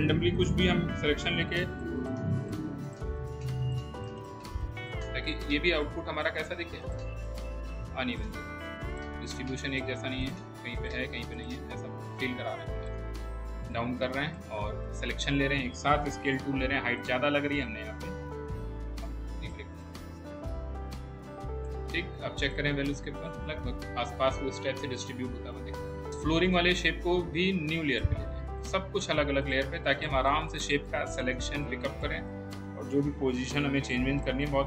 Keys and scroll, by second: 1.7 Delete, 16.1 r, 33.2 w.